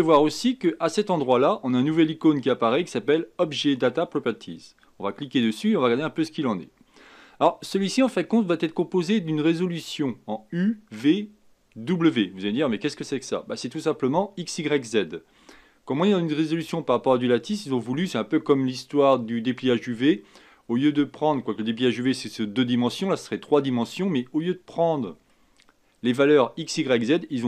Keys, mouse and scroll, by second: 5.3 click, 25.3-27.4 middle drag.